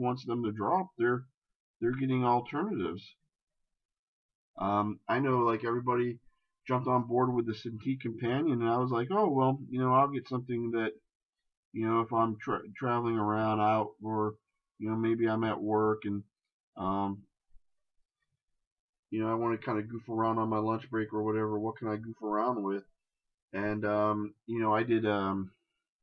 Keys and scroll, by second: 9.0 shift+space.